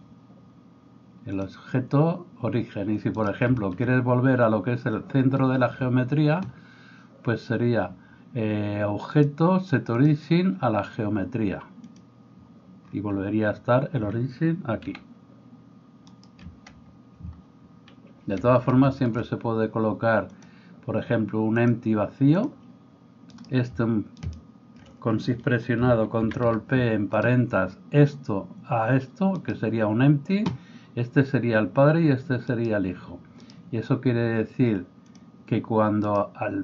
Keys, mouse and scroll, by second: 0.0-1.4 middle drag, 1.4-35.2 drag, 3.2 middle click, 3.2 right click, 14.9 r, 23.3 middle click, 23.3 right click, 26.3 ctrl+p, 32.5-36.6 middle drag, 32.5-35.2 right drag.